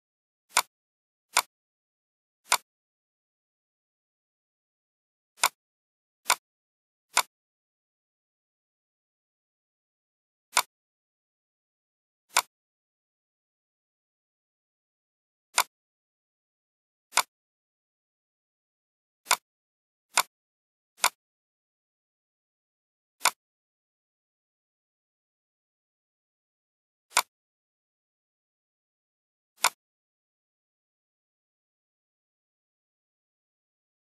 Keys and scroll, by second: 31.9 Down, 33.8 Right.